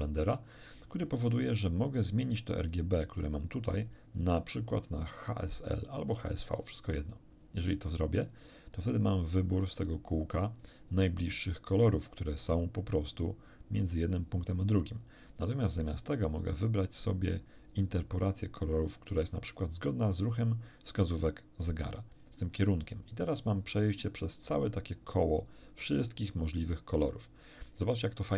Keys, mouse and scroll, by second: 3.9 click, 6.7 click, 9.8 click, 10.6 click, 15.7 click, 22.1 click.